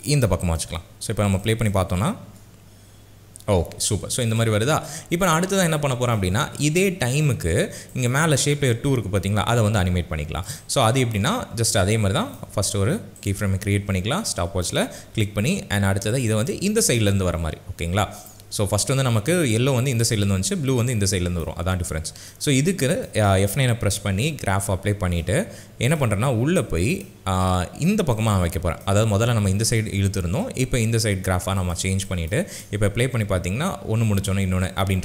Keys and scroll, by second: 2.3 space, 9.8 p, 24.4 F9, 32.5 space.